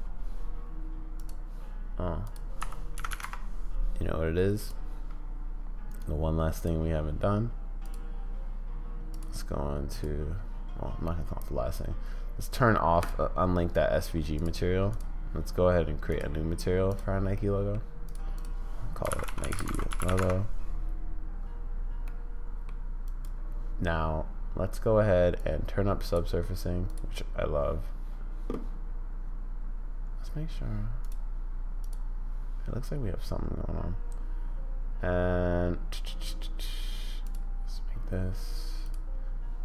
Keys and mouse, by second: 2.4-3.7 drag, 3.1 0, 5.9 right click, 6.6 click, 7.6 click, 9.3-10.2 drag, 13.0 click, 16.1 click, 16.9 drag, 17.4 click, 18.4-20.7 drag, 22.0 middle click, 23.0 click, 25.5 click, 31.8 click, 37.4 click.